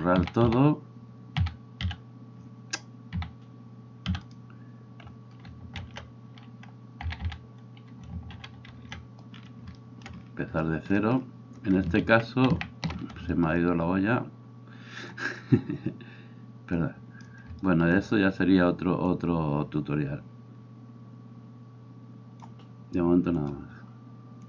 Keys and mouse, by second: 0.2 a, 0.4 a, 1.4 a, 1.9 x, 3.2 a, 4.2 x, 5.8 alt+r, 7.1 a, 8.4 alt+r, 8.7 alt+g, 12.1 ctrl+z, 12.5 ctrl+z, 15.1-16.8 middle drag, 16.8-24.4 drag.